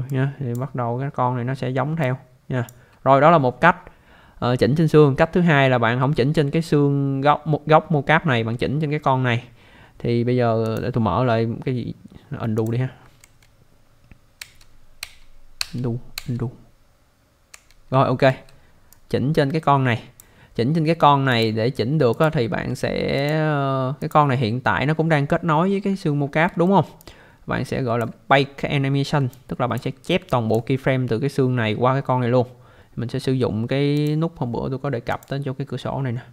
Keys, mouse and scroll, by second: 0.1 click, 2.2 click, 6.1 alt+middle click, 10.6 click, 12.5 click, 13.2 ctrl+z, 18.9 click, 21.3 click, 22.1 click, 23.2 click, 24.0 click, 25.0 scroll up 1, 26.2 scroll down 1, 26.6 alt+middle click, 27.0 alt+click, 29.3 alt+click, 30.3 alt+click, 34.0 click, 35.1 click.